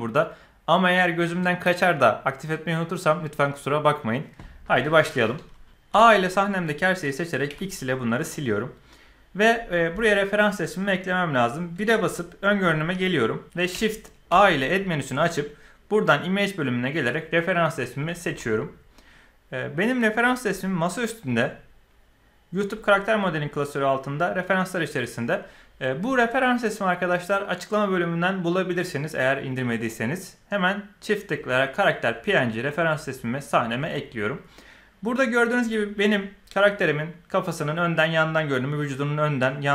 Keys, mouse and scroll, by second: 5.9 a, 7.4 x, 11.7 KP_1, 13.4 shift+a, 14.3 shift+a.